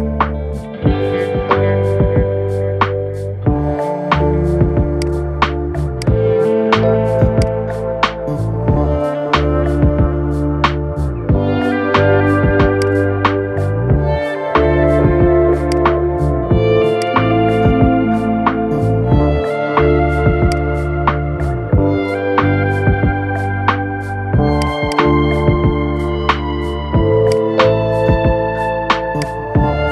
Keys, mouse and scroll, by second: 0.3 BackSpace, 4.7 click, 5.7-7.9 drag, 7.9 scroll up 3, 8.7 scroll down 1, 9.7-10.5 shift+middle drag, 10.5 scroll down 2, 11.7-12.5 shift+middle drag, 12.5 click, 15.4-17.9 drag, 17.9 scroll up 3, 18.3-20.2 shift+middle drag, 20.2 click, 24.6 click, 25.0 scroll down 2, 25.6-27.1 middle drag, 27.1 click, 29.0-29.9 drag.